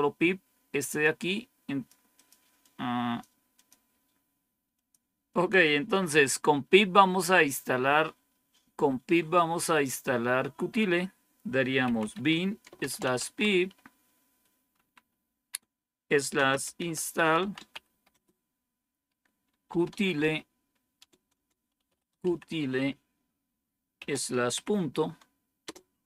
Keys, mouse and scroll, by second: 0.9-3.6 drag, 4.6 click, 11.5-14.7 typing, 16.2-22.6 typing, 23.9-24.4 typing, 25.5 typing.